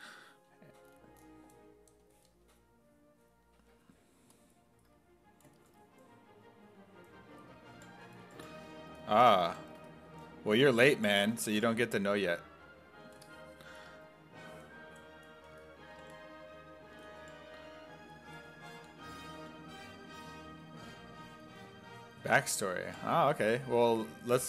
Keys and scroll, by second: 7.1-12.1 typing, 15.5 s, 16.0 5, 16.9 s, 17.2 5, 18.6-19.9 typing, 21.7-24.4 typing.